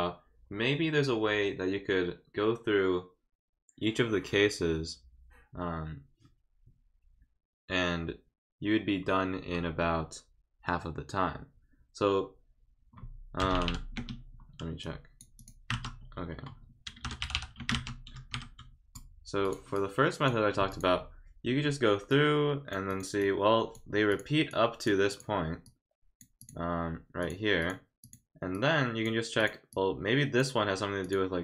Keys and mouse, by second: 13.9 space, 14.8 click, 15.4 click, 17.6 space, 19.4 click, 19.7 click, 20.7 click, 22.1 click, 22.9 click, 23.2 click, 24.1 click, 24.5 click, 25.1 click, 25.6 click, 26.4 click, 27.2 click, 27.6 click, 28.0 click, 28.5 click, 29.4 click, 29.7 click, 31.0 click.